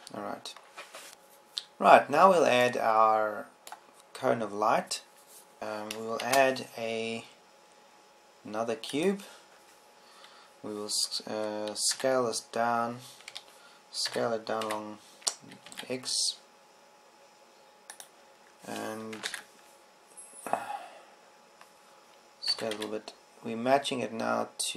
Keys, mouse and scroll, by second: 1.1 ctrl+Up, 2.2 a, 5.6 shift+s, 5.6 shift+a, 7.0 a, 7.8 shift+a, 13.5 s, 15.6 s, 19.6 click, 20.8 ctrl+KP_1, 24.4 s.